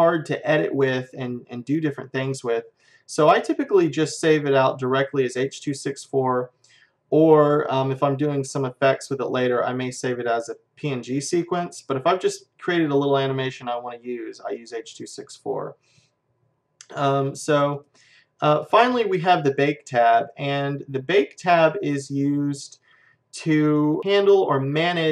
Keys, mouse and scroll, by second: 17.7-20.4 drag, 22.0-23.9 middle drag.